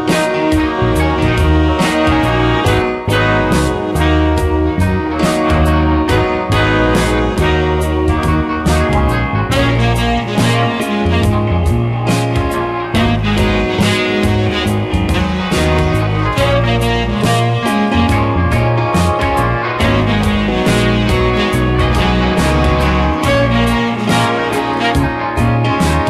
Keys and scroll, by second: 0.7 space, 7.3 space, 17.7 space, 21.9 space, 23.0 space.